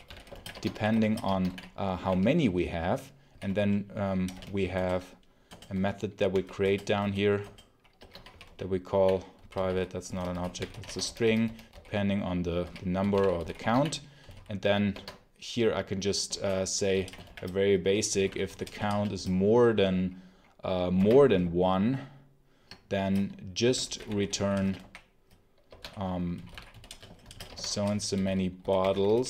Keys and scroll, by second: 0.0-4.2 typing, 4.6 alt+Return, 5.4 Return, 6.2 i, 6.5 Return, 6.9 Return, 7.3 Return, 7.8-14.7 typing, 14.8 Escape, 16.2-19.2 typing, 20.8 1, 23.4-29.2 typing, 25.6 Escape.